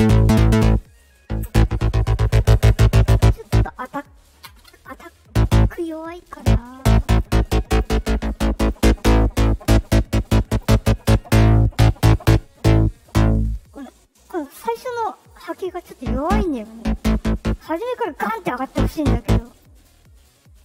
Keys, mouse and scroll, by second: 6.9 click, 8.0 click, 9.3-10.5 drag, 15.1 click, 19.3 click, 19.7 right click, 20.1 right click.